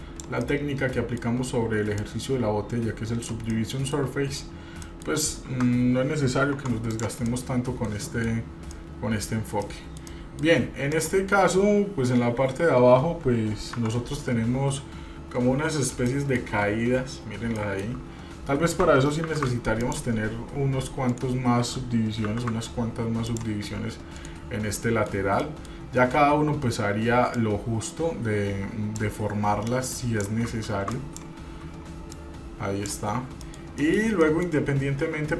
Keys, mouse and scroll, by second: 0.6 middle click, 2.2-3.6 drag, 3.7 middle click, 4.9 scroll down 2, 5.0 middle click, 6.8 Tab, 7.1 click, 7.5 middle click, 8.2 middle click, 8.9 middle click, 9.5 scroll down 1, 9.8 middle click, 10.8 scroll up 1, 11.1 click, 13.9 Tab, 15.4 scroll up 2, 16.3 shift+middle click, 17.1 scroll up 1, 17.8 shift+middle click, 19.4 ctrl+r, 22.7 ctrl+r, 24.9 middle click, 25.6 middle click, 27.5-29.3 drag, 29.8 click, 31.0 shift+click, 32.3 click, 33.6 middle click, 34.0 middle click, 34.4 middle click, 35.1-35.3 scroll up 2.